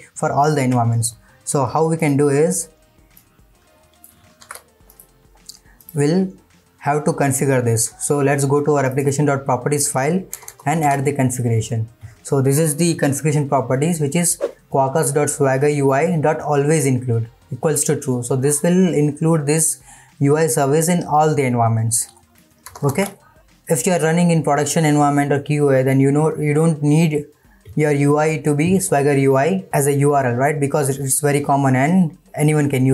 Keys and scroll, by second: 10.8 ctrl+v, 22.9 ctrl+s.